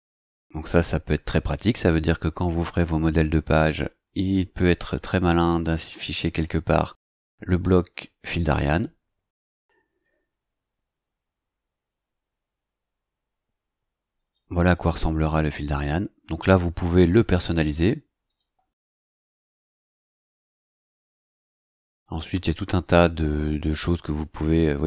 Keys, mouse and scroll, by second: 10.2-10.7 scroll down 2, 14.6 scroll down 2, 18.2 click, 18.7 scroll down 2.